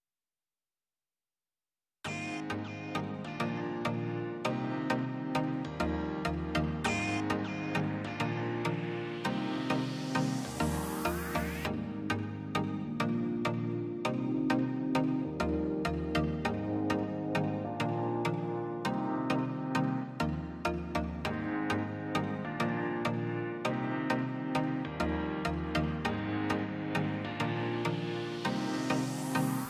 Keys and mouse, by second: 1.5-3.1 drag, 4.3-6.9 drag, 7.3 middle drag, 8.0 drag, 9.0-10.5 drag, 13.0 click, 13.6 click, 15.8 q, 18.4-19.1 drag, 20.2 middle drag, 20.5 middle click, 21.4 shift+middle click, 21.8 middle click, 22.1 shift+middle click, 22.5-23.3 drag, 23.4-25.4 drag, 25.7-26.7 middle drag, 28.4 drag, 29.4-29.6 drag.